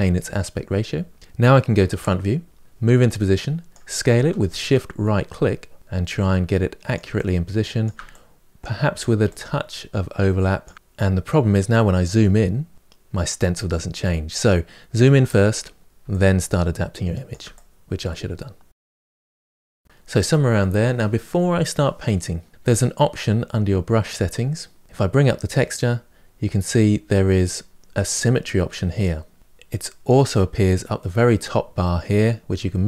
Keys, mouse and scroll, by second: 1.5 KP_1, 2.6-10.7 right drag, 10.7 scroll down 4, 10.8-12.1 scroll up 4, 12.1-12.7 scroll down 5, 12.7-13.2 scroll up 5, 14.8-15.8 shift+middle drag, 15.8 shift+right click, 16.4 right click, 18.6-32.8 shift+right drag.